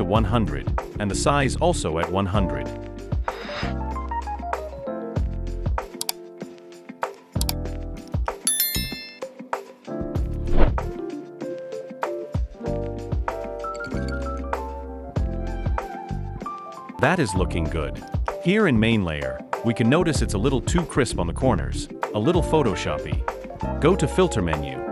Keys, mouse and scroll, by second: 0.0-0.6 typing, 11.6-12.8 typing, 14.5-15.7 typing.